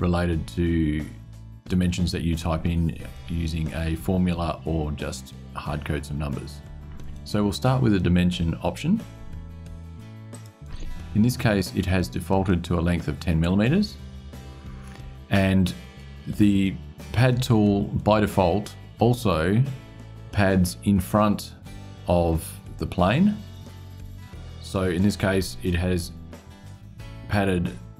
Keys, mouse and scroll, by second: 10.1 click.